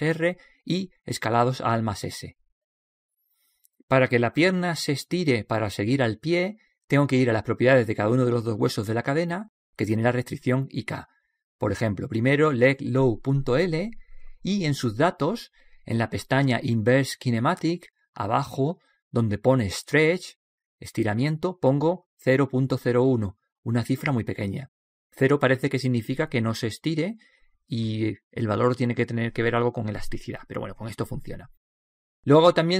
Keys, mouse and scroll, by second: 1.2 alt+s, 2.6-4.7 middle drag, 4.8-5.8 middle drag, 7.6-9.4 right drag, 8.9-11.8 drag, 12.1-15.2 drag, 16.0-18.6 drag, 18.8 click.